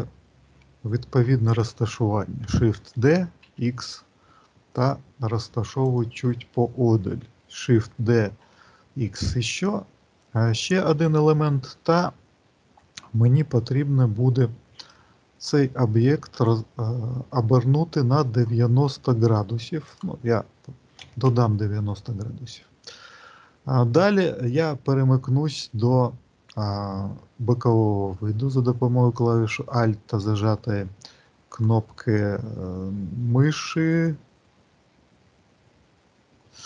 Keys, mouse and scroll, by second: 2.8 shift+d, 14.7 click, 16.3 click, 19.8 click, 30.0 alt+middle click, 30.9-33.0 scroll down 18, 33.0 scroll down 1, 33.4 alt+middle click, 34.4-35.5 scroll up 5, 35.5-36.4 scroll up 2.